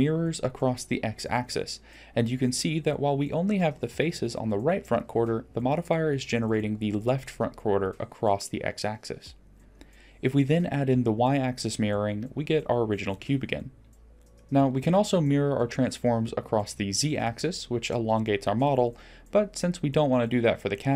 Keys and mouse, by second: 1.3-2.2 middle drag, 2.7 middle click, 3.3-3.7 middle drag, 4.8 Tab, 5.4 middle drag, 11.0 middle click, 14.3-15.2 middle drag, 17.9 click, 18.6-19.1 middle drag.